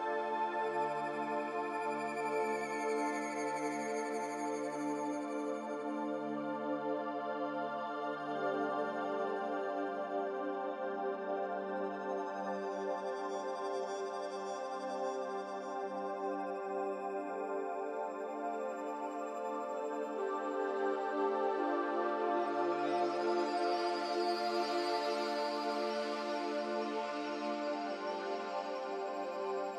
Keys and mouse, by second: 1.0 click, 3.2-4.5 middle drag, 6.4 click, 7.2-7.7 middle drag, 9.2-15.2 drag, 16.7 middle click, 18.0-21.1 middle drag, 22.6-25.2 drag.